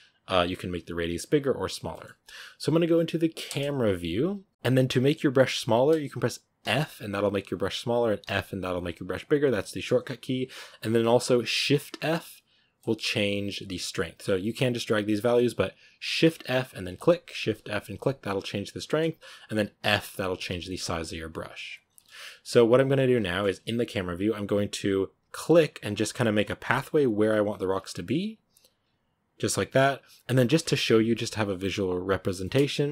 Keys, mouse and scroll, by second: 1.7 scroll down 1, 1.8-3.3 shift+middle drag, 3.3 KP_0, 4.5 f, 7.1 f, 8.1 f, 10.1 f, 11.8 shift+f, 14.3-16.1 drag, 16.1 shift+f, 17.3 shift+f, 19.7 f, 20.2 f, 20.8 f, 21.9 shift+middle click, 22.3-22.6 scroll up 2, 23.1-25.0 shift+middle drag, 25.0-27.7 drag, 27.7 shift+middle click, 28.2-30.5 drag, 30.5-31.7 shift+middle drag, 31.7-32.3 scroll down 2, 32.3 scroll down 1, 32.3-32.9 shift+middle drag.